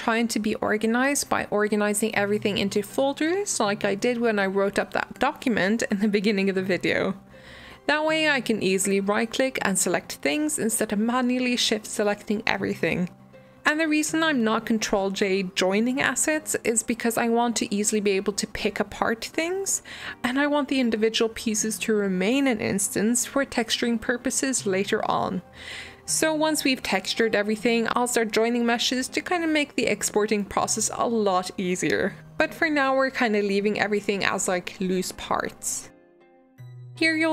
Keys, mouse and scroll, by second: 0.1 click, 1.4 click, 4.4 click, 8.1-9.6 right drag, 9.6 g, 11.2 drag, 11.4 shift+drag, 11.5 shift+drag, 11.7 shift+drag, 11.8 shift+drag, 12.0 shift+drag, 12.2 shift+click, 12.4 shift+drag, 12.6 shift+click, 12.9-13.2 middle drag, 13.2 shift+drag, 13.8-14.4 middle drag, 14.4 g, 15.0 g, 15.6 middle drag, 15.8 scroll up 1, 16.0-16.7 middle drag, 16.7 g, 18.2 g, 19.1 shift+middle click, 19.3 scroll up 1, 19.5-19.9 middle drag, 19.9 g, 20.5-22.5 middle drag, 22.5 g, 23.8-24.6 middle drag, 24.6-26.2 scroll down 1, 26.4 alt+d, 27.0 r, 29.0 g, 30.4 middle click, 30.9 g, 32.0-32.6 middle drag, 32.6 alt+d, 33.4 middle click, 33.7 r, 35.4-36.0 middle drag, 36.0 g.